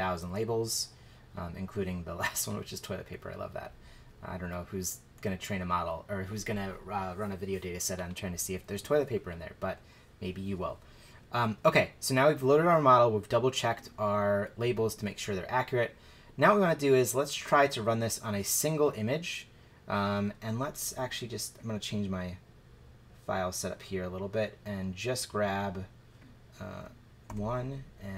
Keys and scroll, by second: 27.3 1.